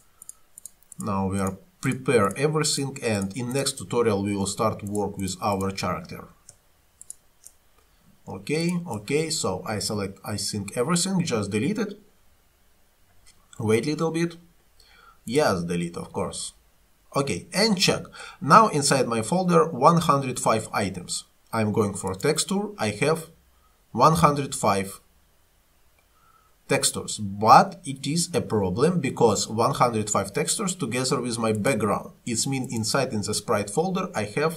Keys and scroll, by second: 10.0 Delete.